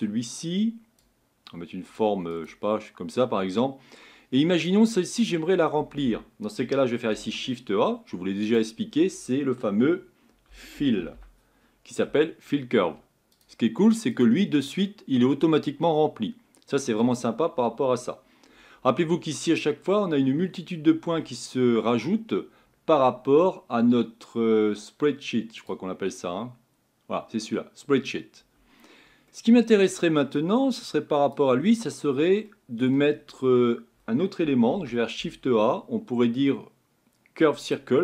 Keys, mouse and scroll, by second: 13.4 l, 14.8-37.7 middle drag.